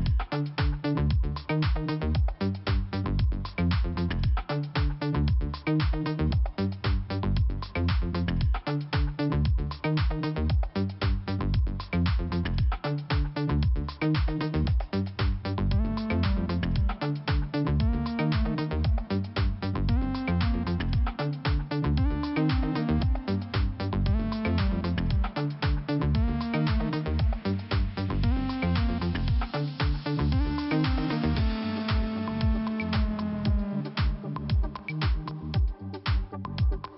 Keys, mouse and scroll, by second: 0.8 click, 1.9 click, 4.5 click, 4.6 click, 6.3 f, 6.9-7.4 scroll down 1, 7.4 middle click, 7.5 middle click, 7.8 middle click, 9.1-10.2 scroll up 2, 11.2 click, 11.2 click, 15.1 click, 15.2 click, 16.0 click, 17.1 click, 19.7 click, 20.3 click, 22.3 click, 23.4 click, 24.5 middle click, 24.7 middle click, 26.3 scroll up 2, 27.7 click, 28.4 middle click, 29.7 middle click, 29.8 middle click, 30.7 click, 33.8 click, 34.4 click, 34.5 click, 35.0 click, 36.4 click.